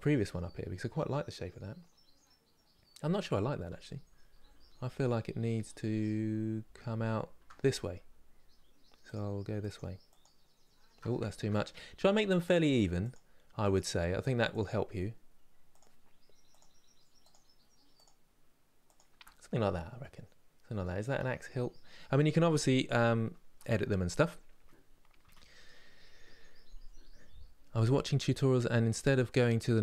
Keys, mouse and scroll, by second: 3.4 ctrl+z, 3.8-5.3 ctrl+z, 8.7 ctrl+right click, 9.7-11.0 ctrl+right drag, 11.0 ctrl+z, 12.1-19.7 ctrl+right drag, 19.7-22.7 middle drag, 24.9 KP_3.